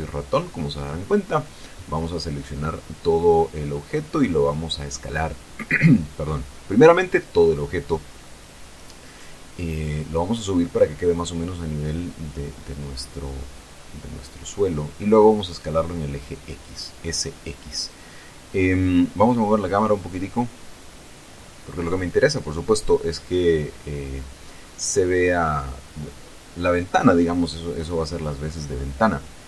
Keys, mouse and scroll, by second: 3.9 a, 4.7-6.7 middle drag, 7.0 s, 9.1 click, 10.0-12.6 drag, 14.0-14.9 typing, 15.7 click, 16.4 KP_0, 18.1 Tab, 19.1 right click, 20.7 g, 22.7 click, 23.4 r, 28.2 click.